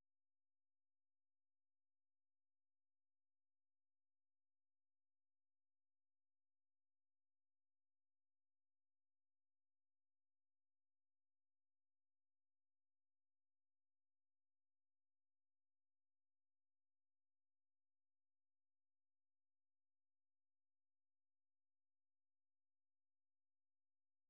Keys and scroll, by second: 2.1 super+2, 2.5 super+1, 3.5-4.8 typing, 5.5 ctrl+v, 6.8 ctrl+[, 7.3-8.5 typing, 8.7 Return, 9.8 super+3, 10.1 super+2, 11.3 ctrl+w.